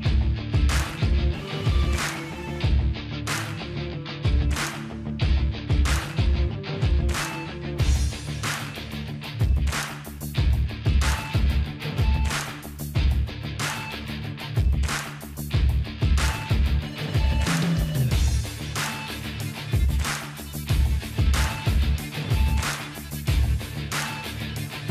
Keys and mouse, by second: 0.4 ctrl+b, 3.3-4.5 drag, 3.3-4.5 middle drag, 4.4 KP_0, 4.8 z, 5.7-6.7 drag, 5.7 middle click, 6.3 z, 6.7 middle click, 6.8 click, 7.5 z, 7.8-10.0 middle drag, 8.7 z, 10.0-11.0 drag, 10.6 ctrl+s, 11.0-12.1 middle drag, 12.8-13.9 middle drag, 13.9-15.4 drag, 15.5 click, 16.5 middle click, 16.6-17.6 drag, 16.8 middle click, 17.6-19.1 middle drag, 19.7 KP_0, 20.3 middle click, 20.8-21.8 drag, 21.2 Tab, 21.2 right click, 21.8-24.1 middle drag, 22.1 z, 23.6 ctrl+r.